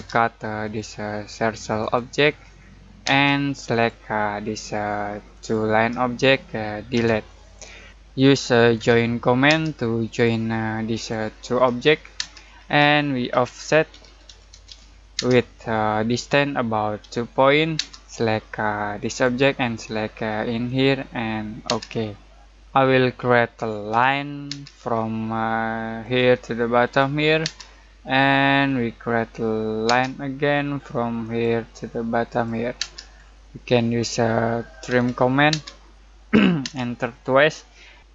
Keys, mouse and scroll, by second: 0.6 click, 3.0 space, 3.6 click, 6.9 Delete, 8.7 j, 9.4 space, 10.1 click, 12.1 space, 13.3-15.1 typing, 17.0 2, 17.7 space, 19.0 click, 21.6 space, 23.9 l, 24.4 space, 24.9 scroll up 1, 26.0 click, 27.4 space, 27.6-28.0 scroll down 1, 28.0 middle click, 28.6-29.8 scroll up 1, 29.8 space, 31.2 click, 32.7 space, 33.1-34.8 scroll up 1, 34.5-35.5 typing.